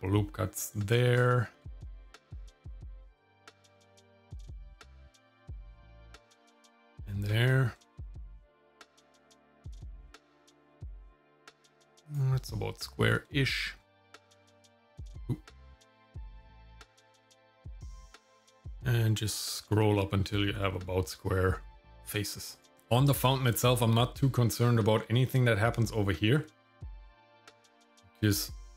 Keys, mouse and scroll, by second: 1.2 shift+middle click, 1.8 middle click, 3.1 ctrl+r, 6.9 shift+middle click, 7.5 scroll down 1, 7.8 shift+middle click, 8.2 middle click, 9.6 ctrl+r, 16.0 shift+middle click, 16.4 middle click, 17.7 ctrl+r, 22.7 shift+middle click, 23.2 shift+middle click, 23.6 middle click, 26.4 Tab, 27.4 click.